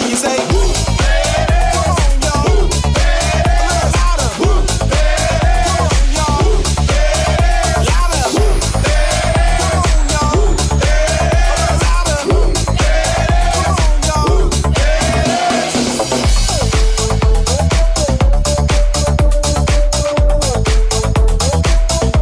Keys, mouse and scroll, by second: 0.4-4.2 shift+drag, 1.4 Tab, 2.4 Tab, 2.4 alt+z, 3.8 1, 4.8 ctrl+r, 9.6 alt+z, 10.7-22.2 drag, 12.6 alt+z, 14.4 k.